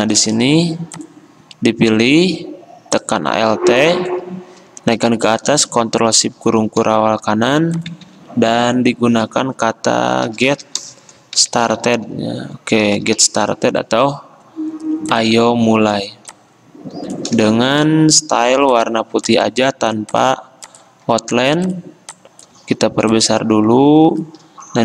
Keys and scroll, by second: 8.2 shift+a, 10.5-13.3 typing, 19.3 d.